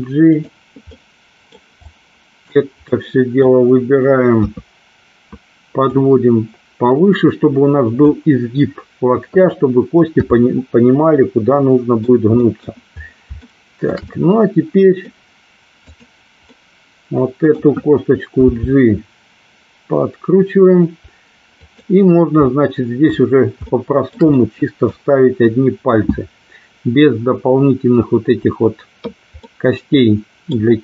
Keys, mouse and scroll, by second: 0.4 click, 1.1 middle click, 2.1 click, 3.0 middle click, 4.4 KP_3, 5.9-8.1 drag, 10.2 KP_7, 11.3 middle click, 12.5 scroll up 1, 12.6 middle click, 13.6 shift+middle click, 14.2 scroll up 1, 14.3 middle click, 15.2 scroll down 1, 15.9 click, 16.6-17.8 middle drag, 18.6 g, 21.7 click, 22.6 middle click, 23.8 shift+middle click, 24.4 scroll up 1, 24.6 middle click, 29.5-30.7 middle drag.